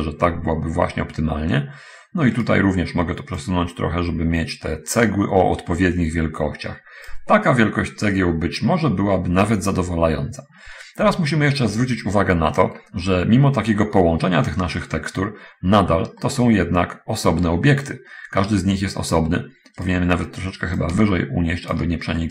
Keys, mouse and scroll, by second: 2.7 right click, 3.3-7.6 drag, 11.2 a, 16.6-19.7 middle drag, 19.8 right click, 21.2 shift+click.